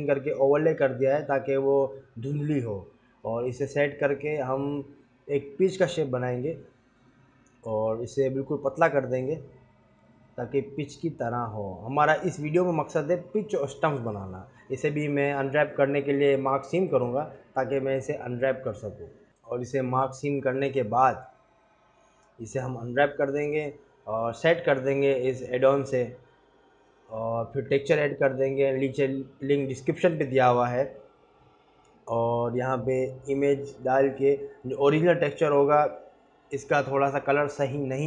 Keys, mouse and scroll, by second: 0.2 s, 1.4 g, 2.1 g, 4.3 scroll down 2, 4.8 scroll up 3, 5.4 click, 5.8 click, 6.0 s, 7.7 click, 8.3 click, 8.7-9.6 scroll up 6, 9.5 click, 9.6 s.